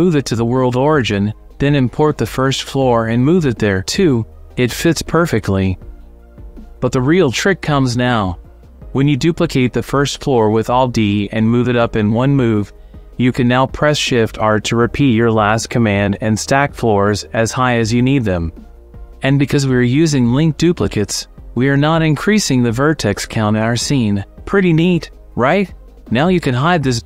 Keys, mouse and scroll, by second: 0.7 click, 1.3 click, 4.2-5.5 drag, 5.6 click, 6.0 middle click, 6.2-7.7 scroll up 1, 8.7 shift+click, 9.2 middle click, 10.2 alt+middle click, 10.8 alt+d, 10.8 middle click, 16.4 shift+r, 17.0 shift+r, 17.6 shift+r, 18.0 middle drag, 18.4 middle click, 19.1 click, 19.3 shift+middle click, 19.5 middle click, 20.1 middle click, 22.3-23.0 middle drag, 25.5-27.0 drag.